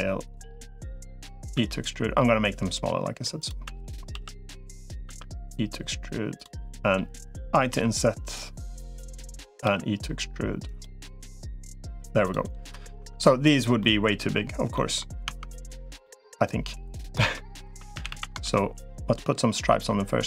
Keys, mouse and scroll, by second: 1.4 e, 3.6 e, 4.0 s, 5.0 e, 6.4 middle click, 7.6 i, 9.4 e, 10.8 middle click, 12.0 click, 12.8 Tab, 13.6 middle click, 14.5 middle click, 15.2 Tab, 15.8 middle click, 16.9 middle click, 17.4 3, 17.8 a, 18.0 a, 18.2 ctrl+r.